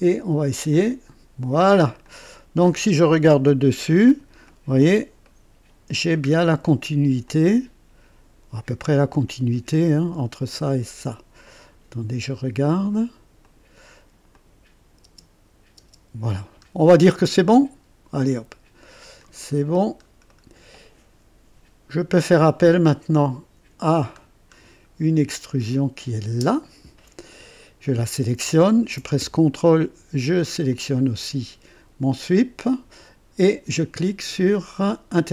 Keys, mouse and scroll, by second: 0.6 click, 2.0 click, 3.3 KP_2, 3.9 scroll up 1, 4.4-4.9 right drag, 5.2-6.1 right drag, 6.2 scroll up 1, 7.2-8.5 drag, 11.4-12.8 drag, 13.4 click, 14.3 click, 15.0 space, 15.7 space, 16.6-16.9 scroll down 1, 17.2-19.3 drag, 19.3-20.0 scroll down 2, 20.2 right click, 24.1-24.5 scroll down 1, 25.6 click, 26.2 space, 30.7 ctrl+click, 35.0 click.